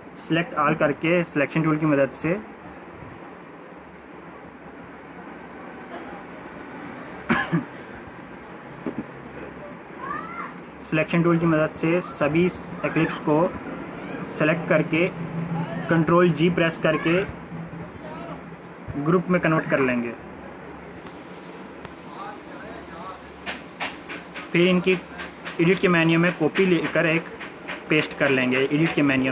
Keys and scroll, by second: 13.5 ctrl+g.